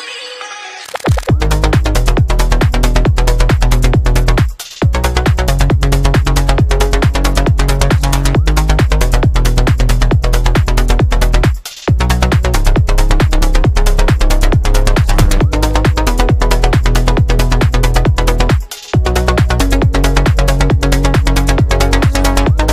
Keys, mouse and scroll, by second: 1.4 click, 2.8-9.6 drag, 9.6-14.3 middle drag, 14.3 click, 14.4-15.5 middle drag, 15.5-22.7 drag, 20.1 a.